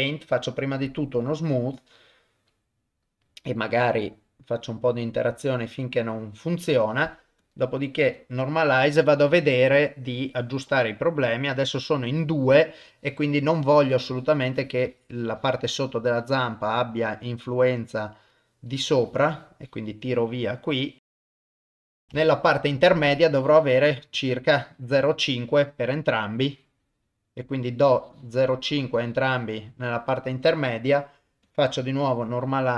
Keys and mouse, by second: 0.2-1.3 drag, 3.7 click, 4.2 click, 4.4 click, 7.4 click, 10.4 middle click, 13.8 click, 14.2 click, 14.9 click, 15.2 click, 15.4 click, 15.6 click, 15.9 click, 16.2 click, 16.5 click, 16.7 click, 17.0 click, 17.2 click, 17.5 click, 17.8 click, 18.7 click, 19.1 click, 19.4 click, 19.7 click, 21.2 click, 21.8 ctrl+z, 22.0 click, 23.1 click, 24.2 click, 25.9 click, 26.5 click, 27.9-29.7 drag, 30.7 click.